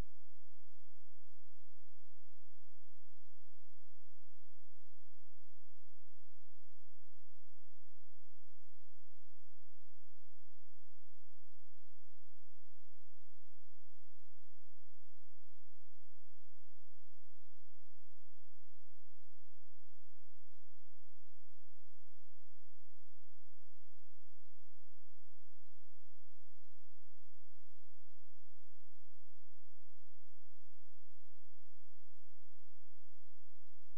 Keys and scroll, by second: 7.6 space, 30.0 shift+Page_Down.